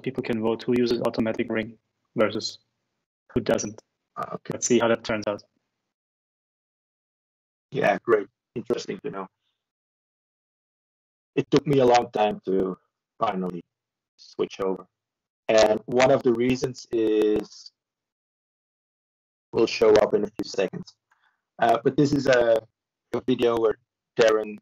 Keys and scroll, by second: 1.3 ctrl+shift+Return, 4.6 b, 17.3 ctrl+-, 17.9 ctrl+-, 18.1 ctrl+-.